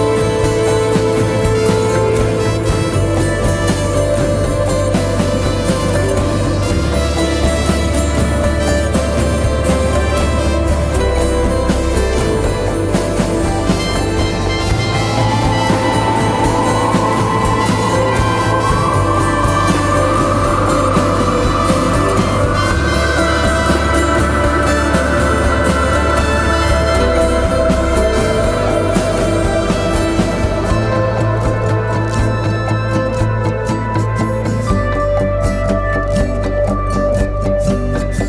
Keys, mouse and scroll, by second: 10.4 ctrl+t, 11.0 alt+shift+click, 14.3 alt+shift+click, 16.8 Return.